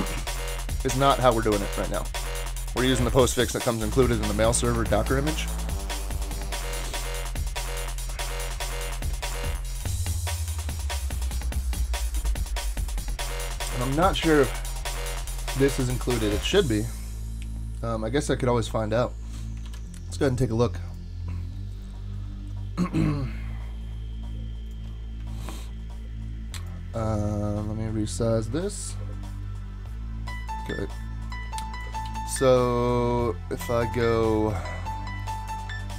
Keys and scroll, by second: 19.6 super+c, 32.0 super+k, 35.8-35.9 typing.